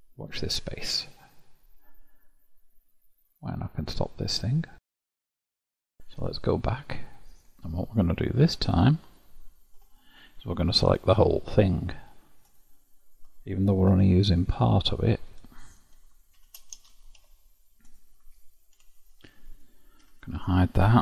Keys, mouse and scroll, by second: 6.1 click, 6.7 scroll up 1, 6.8-7.4 scroll down 1, 7.4-8.4 middle drag, 8.4 Tab, 9.0 click, 9.8 Tab, 10.3-12.4 middle drag, 12.4-13.9 alt+drag, 13.9 3, 14.4 alt+click, 16.4 shift+d, 17.2 p, 18.8 Tab, 19.5 click, 20.0 h, 20.4 click.